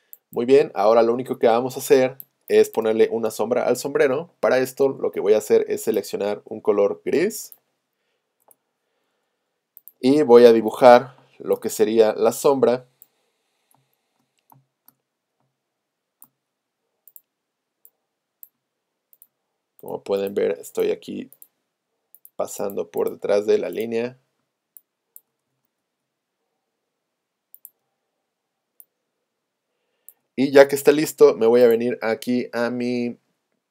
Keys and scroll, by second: 8.4 Return, 11.3 space, 13.7 space, 31.3 v.